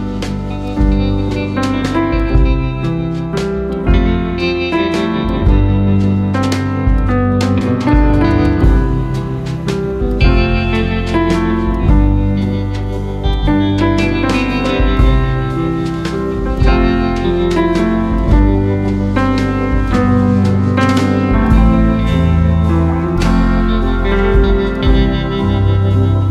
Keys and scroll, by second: 1.3 ctrl+a, 1.8 ctrl+c, 2.4 ctrl+v.